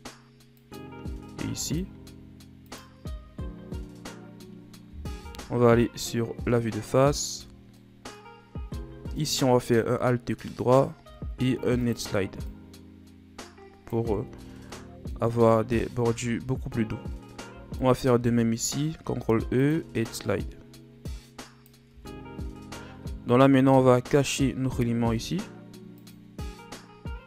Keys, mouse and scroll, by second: 1.3 ctrl+r, 3.0 Tab, 3.2 scroll down 3, 3.4-5.2 middle drag, 5.2 KP_1, 6.7-7.3 scroll up 3, 7.3 Tab, 7.6 scroll down 1, 7.8 middle click, 8.4-9.2 scroll up 1, 9.2 alt+right click, 11.0 ctrl+e, 14.2 Tab, 14.4 scroll down 2, 14.7-15.7 middle drag, 15.7-16.1 scroll up 1, 16.1 Tab, 17.8 alt+right click, 19.0 ctrl+e, 21.9 Tab, 22.2-23.4 scroll down 4, 23.4 scroll down 2, 24.8-25.5 scroll down 3, 26.0 click.